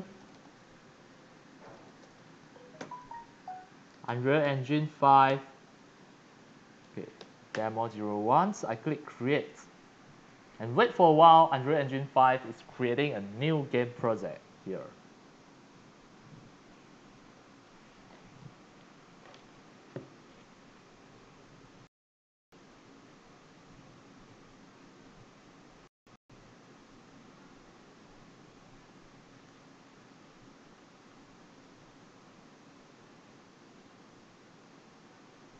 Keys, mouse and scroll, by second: 0.0-5.3 typing, 7.2 0, 7.5 1, 9.3 click, 14.1 click.